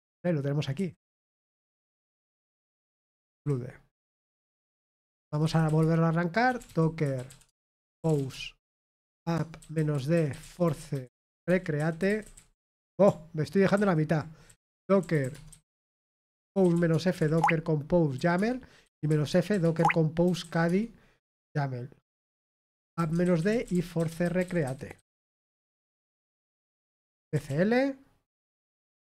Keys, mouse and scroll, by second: 3.3-12.8 typing, 14.3-17.6 typing, 19.6-20.7 typing, 19.7 Tab, 23.2-25.7 typing, 25.7 Return.